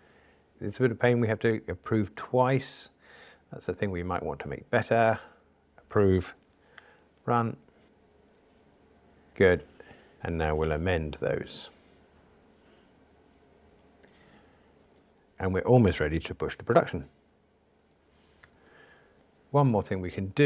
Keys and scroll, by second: 0.1 super+F11, 5.5 super+F11, 6.7 ctrl+r, 11.5 ctrl+alt+m.